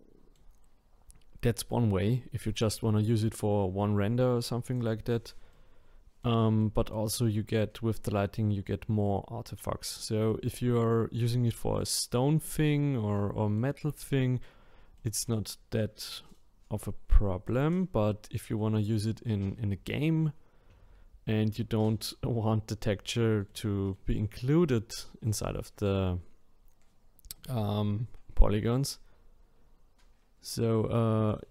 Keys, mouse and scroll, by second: 2.8-4.6 middle drag, 4.6 click, 5.5-7.5 middle drag, 7.5 scroll up 1, 10.3-16.5 middle drag, 16.5 scroll down 1, 17.1-20.1 middle drag, 23.5-26.5 middle drag, 31.3-31.5 drag.